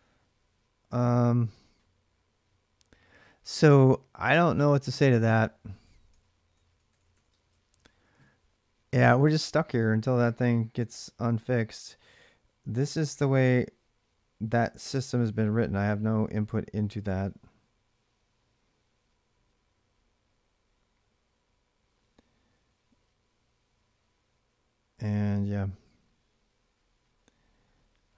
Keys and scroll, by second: 5.6-7.5 typing.